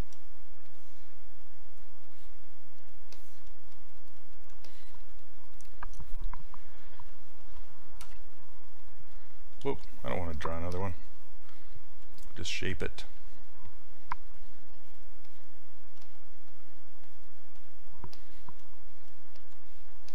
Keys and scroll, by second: 8.1 q, 9.7 ctrl+z, 16.0 s.